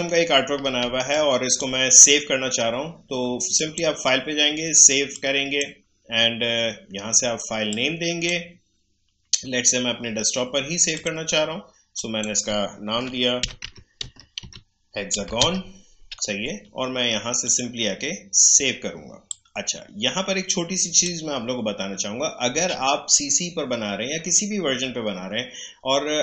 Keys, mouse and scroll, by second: 0.2 alt+scroll down 1, 0.8 space, 1.1 click, 1.3 space, 3.5-7.7 drag, 7.7-10.6 drag, 10.9 click, 13.2-15.9 typing, 17.4-23.4 drag.